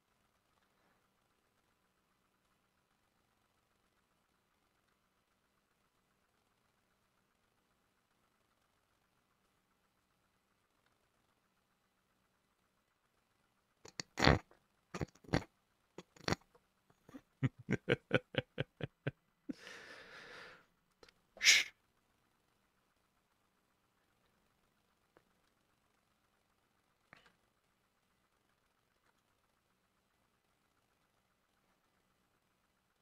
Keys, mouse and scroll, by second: 0.2 shift+middle click, 1.4 shift+middle click, 3.9 e, 4.8 e, 6.5 shift+click, 8.5 e, 8.8 shift+click, 10.8 e, 11.1 shift+click, 16.0 shift+click, 23.0 double click, 23.5 double click, 27.2 ctrl+click, 27.7 double click, 28.1 double click, 28.7 ctrl+z, 29.0 ctrl+z, 29.3 shift+click, 30.8 shift+click, 31.6 double click, 32.0 double click.